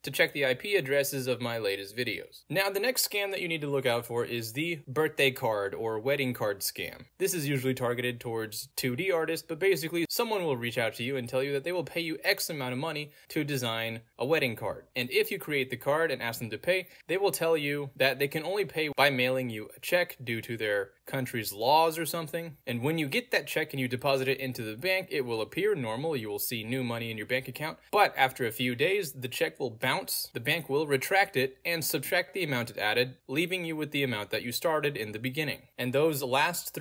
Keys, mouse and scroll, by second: 0.9 click, 2.0 middle click, 2.0-2.6 scroll down 2, 2.6 scroll down 1, 2.8 click, 4.2 middle click, 4.2-4.7 scroll down 2, 4.7 scroll down 1, 4.8 m, 4.9 Return, 6.5 click, 6.8 click, 8.1 click, 9.7 click, 10.1 click, 12.5 click, 14.0 click, 15.8 click, 16.3 middle click, 16.3 scroll down 2, 17.7 click, 21.4 middle click, 21.4-23.2 scroll down 2, 23.9 click, 25.0 scroll down 2, 25.5 click, 26.3 middle click, 26.3-27.6 scroll down 2, 27.6 click, 28.4 scroll down 2, 29.2 click, 30.2 scroll down 2, 30.8 click, 31.4 click, 32.4 click, 33.5 ctrl+a, 33.7-35.6 typing.